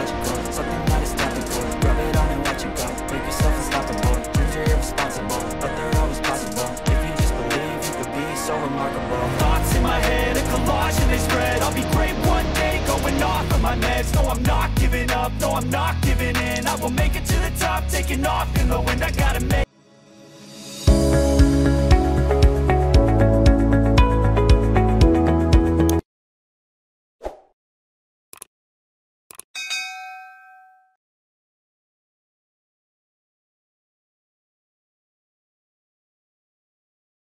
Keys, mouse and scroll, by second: 7.4-8.6 drag, 18.2-19.4 drag.